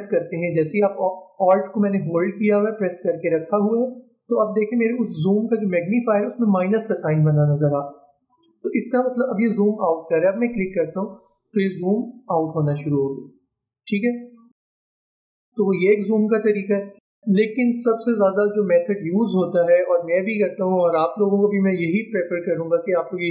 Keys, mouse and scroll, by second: 10.4 alt+click.